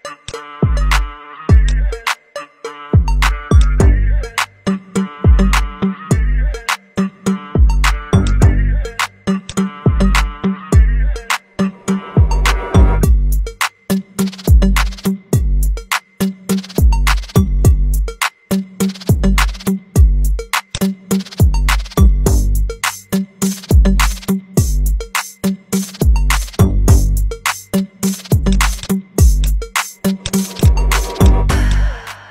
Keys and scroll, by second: 4.7 v, 10.2 v, 11.3 v, 15.2 ctrl+d, 15.5 ctrl+d, 30.6 ctrl+c, 31.8 ctrl+f.